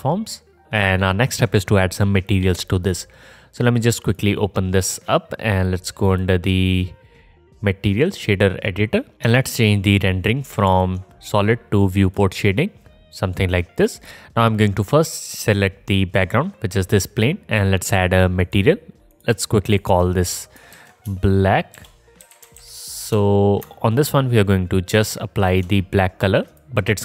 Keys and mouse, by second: 4.3 click, 4.3 middle click, 4.3 right click, 4.7 middle click, 9.1-12.0 alt+drag, 12.1-14.0 drag, 14.0 middle click, 14.1-27.0 drag, 18.4-26.6 middle drag, 18.4-26.6 right drag.